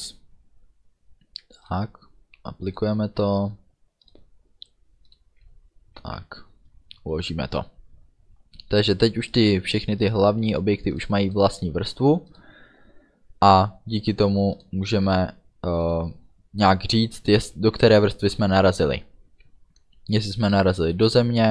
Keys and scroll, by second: 6.1 ctrl+s.